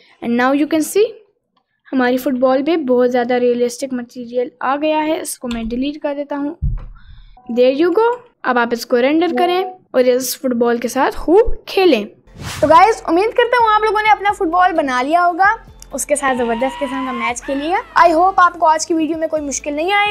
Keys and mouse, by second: 2.2 r, 4.2 middle click, 5.2 click, 5.6 Delete, 7.7 click, 8.1 r.